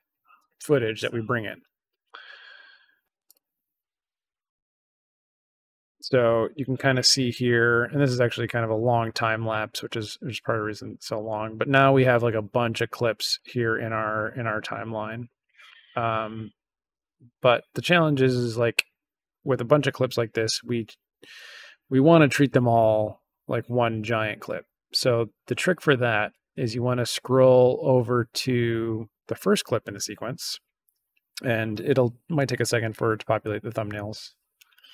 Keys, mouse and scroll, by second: 3.2 click, 6.9-9.2 drag, 9.8-12.7 drag, 13.2 click, 13.6 click, 14.6-17.6 drag, 18.4 click.